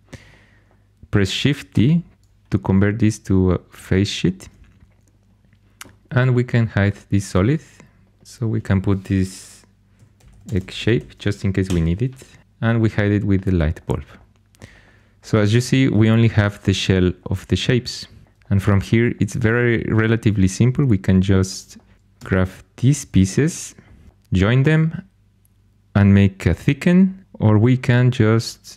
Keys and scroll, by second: 1.7 shift+d, 9.7-11.1 typing, 11.6 Return, 19.9 4.